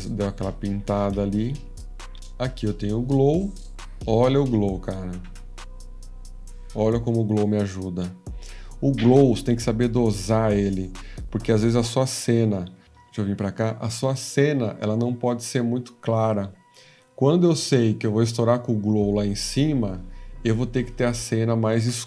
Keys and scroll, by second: 12.7-13.4 typing.